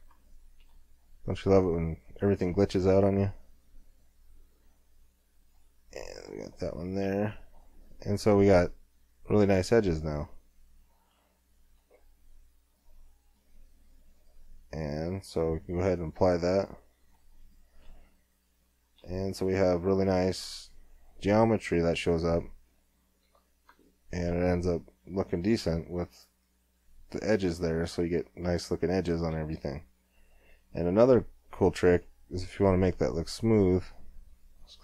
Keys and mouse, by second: 0.3 click, 0.4 middle click, 0.6 click, 0.6 middle click, 0.8 click, 0.8 middle click, 0.8-4.7 drag, 1.5 g, 6.0 middle click, 6.3 Tab, 7.0 click, 7.2 click, 7.3 middle click, 7.4 click, 7.5-8.8 middle drag, 10.7 middle click, 11.8 middle click, 12.1-13.5 middle drag, 15.8-17.6 drag, 16.5 Tab, 17.7 click, 17.9 click, 20.4-22.1 middle drag, 22.1 middle click, 23.3 Tab, 27.9-32.5 middle drag, 32.5-33.5 drag, 34.3 click.